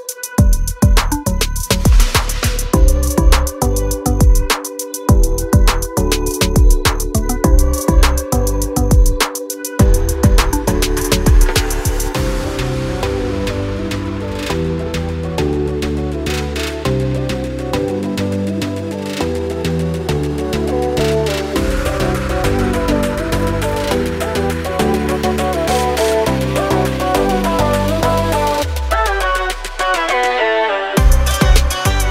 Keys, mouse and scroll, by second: 0.7 click, 5.3 click, 10.5 click, 12.1 F4, 12.9 click, 14.4 F9, 18.0 click, 20.0 ctrl+o, 20.8-21.7 scroll up 1, 21.7-23.3 scroll down 1, 23.3 scroll up 1, 25.0 click, 26.5 click, 31.2 click.